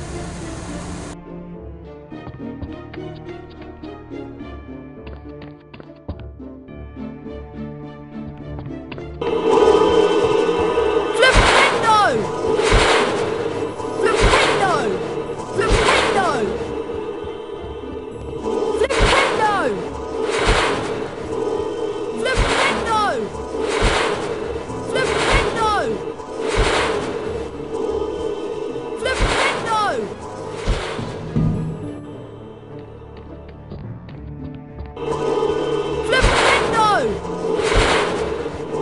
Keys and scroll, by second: 0.0-0.8 typing, 1.9-3.2 typing, 5.3-7.7 typing, 9.6-15.0 typing, 17.4-18.9 typing, 22.0-24.5 typing, 27.4-28.1 typing, 29.9-32.2 typing, 34.6-36.1 typing, 38.4-38.8 typing.